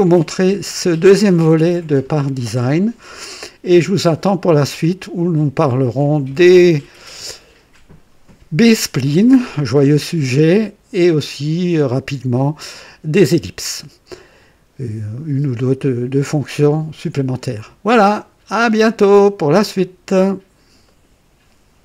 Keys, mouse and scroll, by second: 0.3-1.1 right drag, 18.4 scroll up 2, 19.0-19.7 right drag, 19.0 click, 20.9 right click.